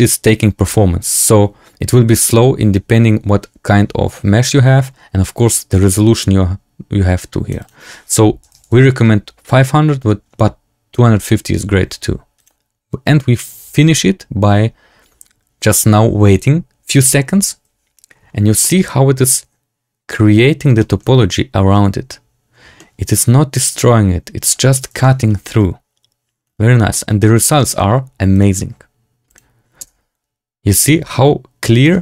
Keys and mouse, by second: 5.6-7.4 drag, 7.5-8.9 drag, 17.2-18.2 drag, 18.5 shift+drag, 20.7 shift+drag, 22.7-23.1 shift+drag, 24.9 shift+drag, 26.8 shift+drag, 27.5 shift+click, 28.4-29.6 drag, 29.7 space.